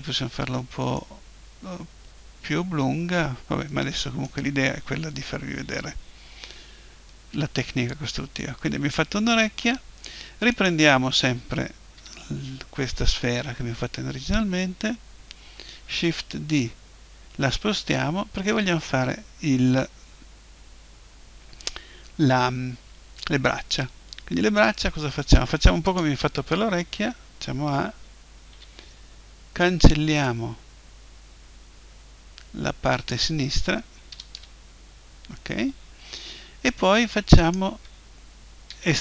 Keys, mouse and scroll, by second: 0.6-2.3 middle drag, 6.2 KP_1, 10.5-12.5 right drag, 12.0 l, 12.3-15.1 middle drag, 15.9 shift+d, 26.0-27.7 drag, 27.0 a, 28.5 b, 34.1 Delete, 37.4-39.0 right drag, 38.7 e.